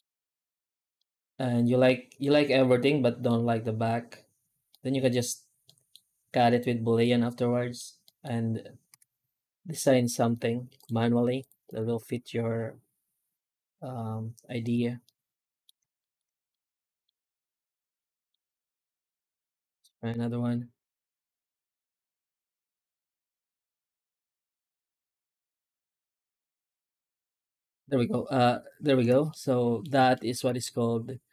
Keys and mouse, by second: 0.9-2.1 middle drag, 2.7-3.1 middle drag, 4.6 middle drag, 5.5 middle drag, 6.9-7.6 middle drag, 7.9 middle click, 8.8 F9, 14.9-15.5 middle drag, 15.8 shift+middle drag, 16.5 middle click, 17.1-18.2 middle drag, 18.3 F9, 29.1-29.7 middle drag, 30.0 shift+middle drag, 30.4-31.1 middle drag, 31.2 middle drag.